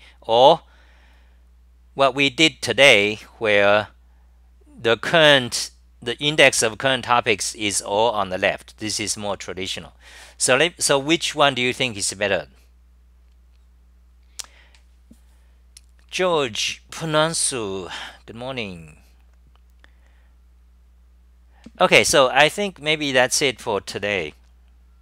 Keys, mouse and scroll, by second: 8.6-10.5 typing.